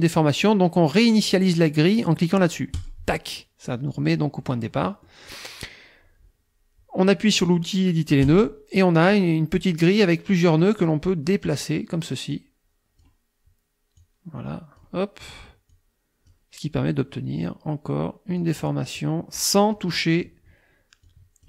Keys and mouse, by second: 2.8 click, 4.4 click, 4.8 middle click, 8.3 click, 10.6-11.8 drag, 12.3 click, 14.0-15.0 drag, 15.7 click, 18.4 click, 19.8 click, 21.0 click.